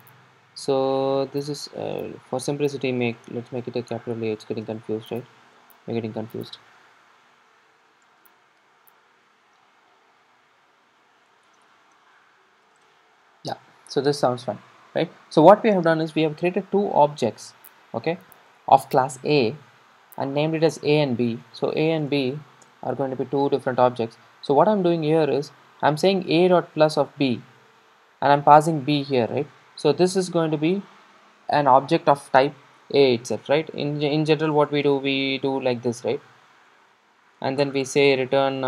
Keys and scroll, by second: 5.7 Escape.